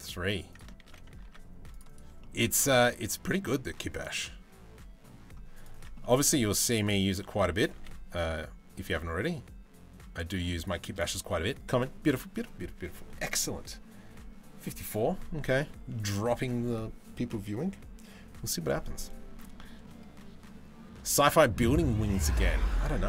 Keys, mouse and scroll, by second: 0.5 ctrl+z, 0.9 ctrl+r, 1.8 scroll down 1, 2.2 ctrl+r, 5.6 middle click, 6.0 Tab, 6.1 click, 7.3 g, 15.6 middle click, 19.2 shift+middle click, 21.8 middle click.